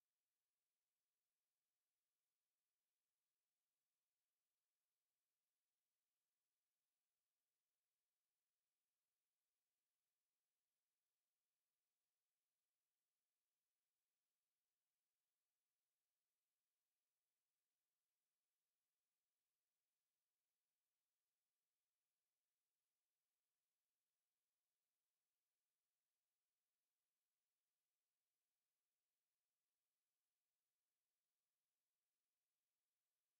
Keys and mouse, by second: 17.0 click, 18.1 ctrl+z, 18.4 click, 20.8 ctrl+z, 21.1 click, 21.6 alt+click, 21.9 alt+middle click, 22.7 alt+click, 23.1 alt+middle click, 23.2 alt+middle click, 26.8 alt+right click, 27.8 click, 28.2 alt+click, 28.5 alt+middle click, 28.9 alt+click, 29.5 shift+click, 30.1 alt+click, 30.5 shift+right click, 32.6 shift+right click, 33.1 shift+right click.